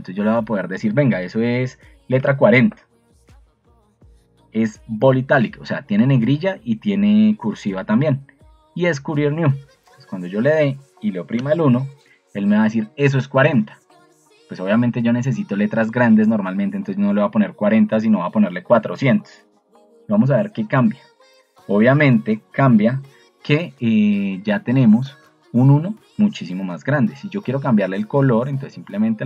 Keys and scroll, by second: 2.0-2.8 typing.